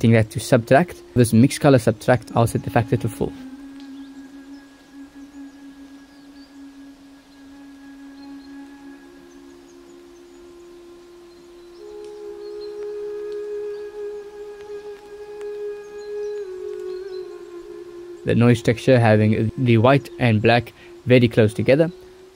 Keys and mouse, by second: 13.0-14.8 drag, 16.3-18.8 drag.